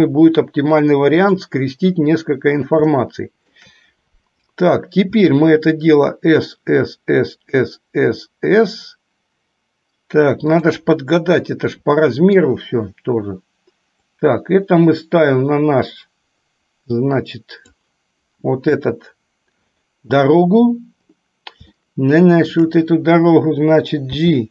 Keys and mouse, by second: 3.3 shift+middle click, 5.5 s, 11.8 middle click, 14.3-18.4 drag, 19.1 KP_7, 22.1-22.9 shift+middle drag.